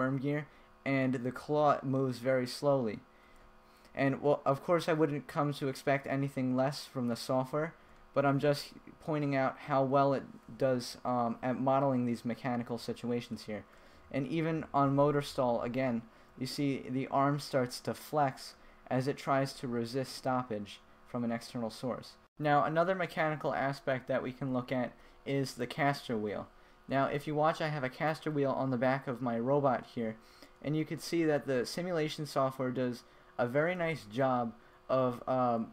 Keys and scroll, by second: 0.9 Right, 4.6 Left, 9.4 Left, 9.7 Right, 12.6 Right, 15.4 Right, 16.2 Left, 17.6 Right, 20.7 Right, 21.5 Left, 27.3 w, 29.5 a, 30.4 w, 31.1 w, 31.6 d, 32.8 s, 34.2 w, 35.6 w.